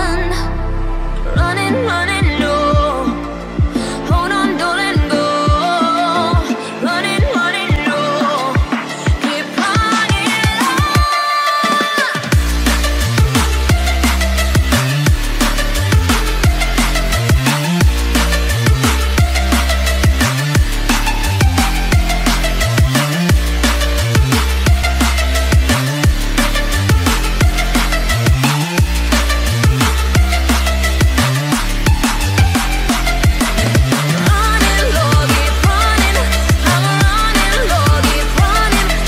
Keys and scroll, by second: 22.7 ctrl+alt+z, 25.7 ctrl+i, 26.9 ctrl+s, 29.0 ctrl+alt+z.